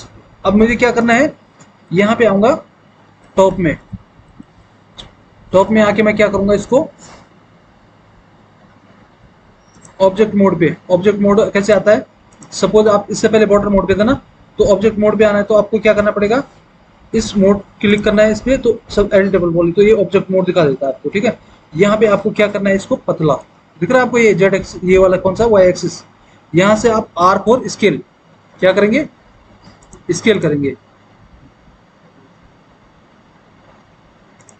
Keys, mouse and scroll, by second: 2.6 alt+w, 3.4 alt+w, 4.4 alt+w, 5.7 alt+w, 21.4 alt+w, 22.0 alt+w, 27.2 r.